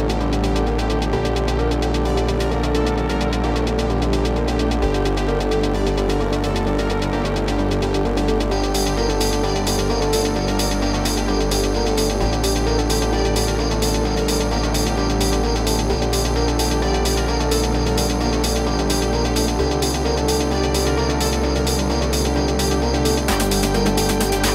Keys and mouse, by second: 0.5 click, 1.3 click, 3.3 click, 4.9 click, 6.5 typing, 9.1 click, 10.8 click, 12.0 click, 14.8 click, 15.2 click, 16.2 click, 16.7 click, 17.5 click, 18.1 click, 19.5 click, 20.4 click, 21.4 click, 22.0 click, 22.7 click.